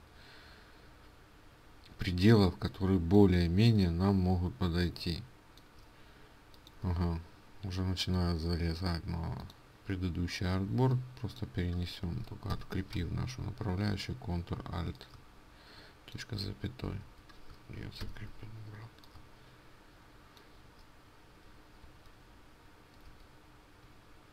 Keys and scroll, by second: 16.7 ctrl+z, 18.0 ctrl+alt+z, 21.6 ctrl+z, 22.8 ctrl+z.